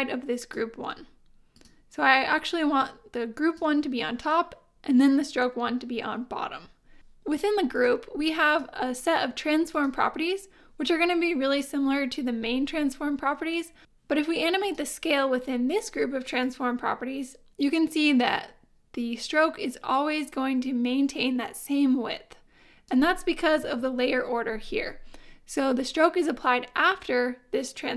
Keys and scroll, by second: 23.6 super+z.